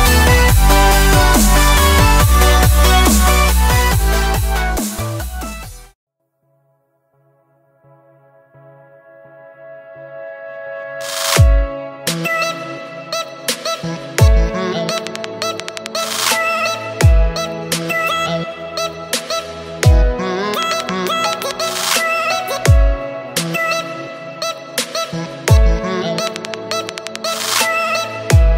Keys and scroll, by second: 2.7 Delete, 3.6 Delete, 4.8 Delete, 11.4-12.5 typing, 14.5 space, 15.0 space, 15.5 Tab, 25.2 v.